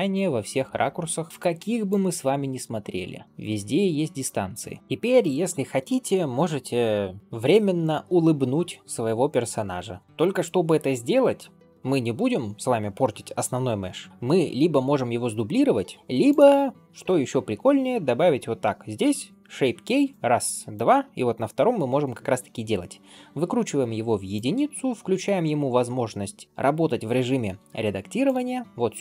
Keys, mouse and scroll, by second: 0.0-4.2 typing, 0.7 right click, 1.7 click, 2.1 middle click, 2.8 click, 3.2 click, 3.6 click, 4.2 right click, 4.8 middle click, 9.5 scroll up 2, 10.0 ctrl+space, 14.4-15.0 scroll down 2, 15.0-15.4 scroll down 1, 15.4 scroll up 1, 16.1-17.1 drag, 16.1-16.5 scroll up 1, 20.6-23.7 drag, 24.2 click, 28.1 click.